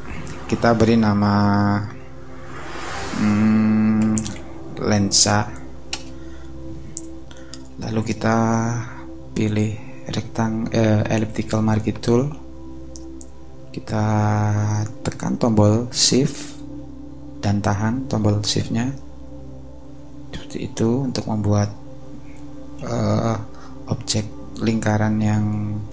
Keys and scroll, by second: 3.8-5.5 typing, 5.9 Return, 21.3 shift+space, 24.8 shift+space.